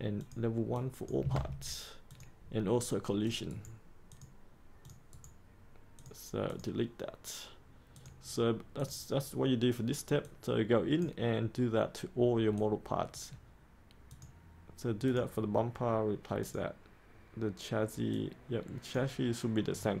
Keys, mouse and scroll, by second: 1.3 ctrl+v, 2.0 click, 3.4 right click, 4.0 click, 5.1 right click, 5.9-20.0 drag.